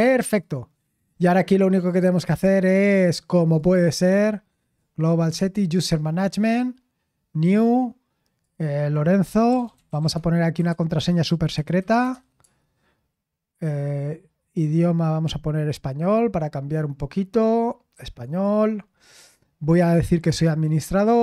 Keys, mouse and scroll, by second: 0.2 click, 1.7 click, 2.2-4.0 typing, 3.5 click, 4.6 click, 5.1 click, 7.0-12.6 typing, 7.4 click, 7.8 click, 8.4 click, 14.6 click, 18.0-18.7 typing, 18.2 click, 19.9 click, 20.9 click.